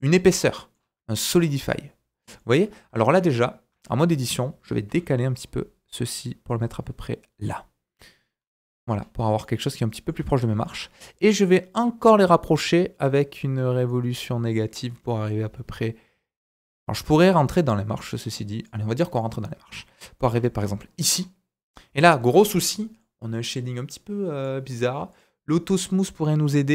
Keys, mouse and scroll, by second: 0.3 middle click, 0.7 scroll up 2, 1.1 shift+middle drag, 1.4 scroll up 1, 3.1 KP_1, 3.7 Tab, 4.0 a, 4.9 g, 7.4-10.2 right drag, 7.7-8.6 scroll down 5, 8.6-9.4 scroll up 4, 9.4 middle click, 10.2 Tab, 10.3 scroll up 2, 10.6 shift+middle click, 11.8-19.2 drag, 19.2-19.7 middle drag, 19.9 scroll down 1, 21.1 scroll up 2, 22.8 middle click, 24.4 right click, 25.9 middle click.